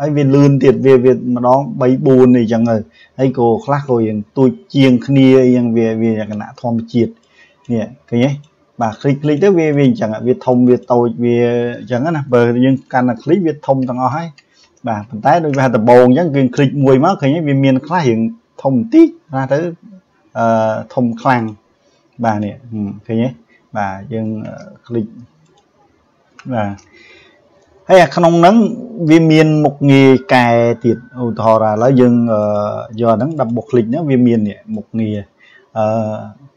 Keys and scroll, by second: 12.9 ctrl+z, 24.3 ctrl+z, 26.5 ctrl+z.